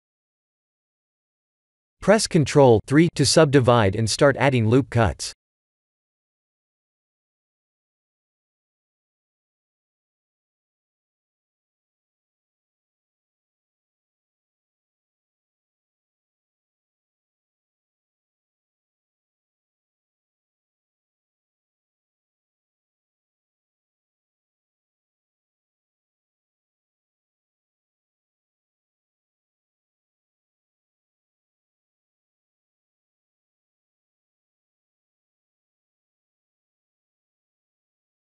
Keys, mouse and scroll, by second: 1.0 shift+z, 1.3 middle click, 2.5 middle click, 3.2 click, 3.6 ctrl+3, 4.3 KP_3, 4.8 KP_1, 6.9 Tab, 7.7 ctrl+r, 10.6 Tab, 10.9 middle click, 13.5 ctrl+z, 14.0 ctrl+z, 15.1 3, 15.4 click, 15.9 middle click, 16.6 g, 18.0 ctrl+z, 18.7 s, 20.3 ctrl+z, 20.7 g, 22.0 ctrl+z, 22.9 KP_1, 23.9 s, 25.6 g, 29.4 ctrl+r, 31.2 middle click, 33.2 Tab, 33.5 middle click, 35.0 middle click, 35.5 Tab, 36.0 middle click.